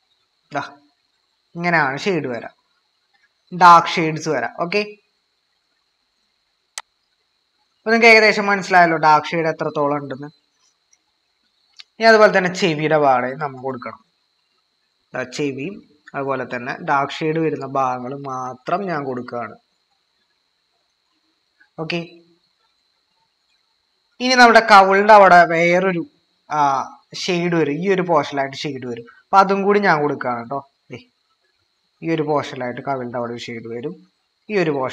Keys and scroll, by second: 12.8-13.6 typing, 24.3-25.1 typing.